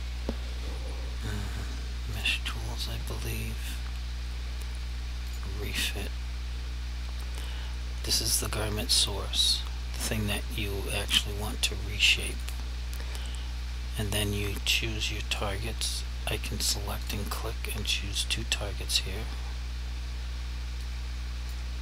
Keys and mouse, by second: 2.2 click, 5.4 click, 12.4 click, 17.1 shift+click, 21.0 click.